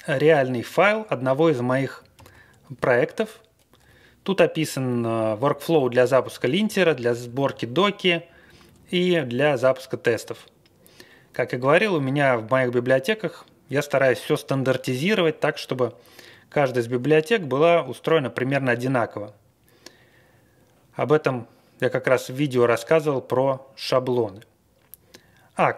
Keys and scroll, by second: 0.1 Up, 0.5 Up, 0.8 Up, 0.8 Page_Up, 0.9 Page_Up, 0.9 Page_Up, 2.1 alt+v, 3.8 Page_Up, 4.1 Up, 4.1-4.6 Page_Up, 4.9 Page_Down, 5.7 Page_Down, 6.1 Page_Down, 6.4 Page_Down, 6.9 Page_Down, 7.5 Page_Down, 7.7 Down, 8.4 Up, 9.1 Up, 9.6 Down, 10.0 Down, 10.0 scroll down 1, 12.2 scroll down 1.